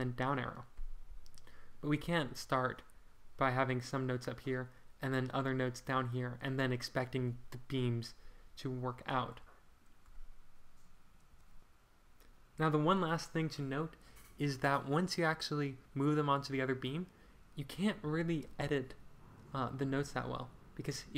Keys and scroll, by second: 8.8 Escape, 11.3 BackSpace.